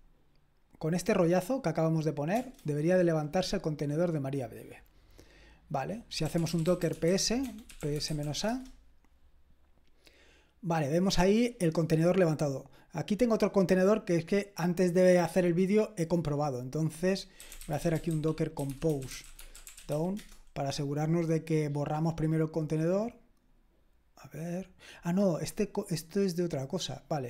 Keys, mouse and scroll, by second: 2.3 Return, 6.0-8.8 typing, 17.1-20.9 typing.